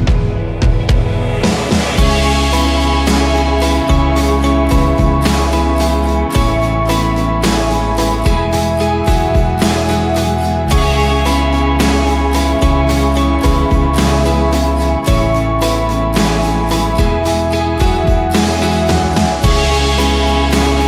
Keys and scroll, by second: 1.9-2.6 typing, 2.7 Return, 4.8 v, 11.8 ctrl+d, 13.5 Up, 13.6 Up, 13.8 Up, 14.3 Up, 16.6-20.6 typing.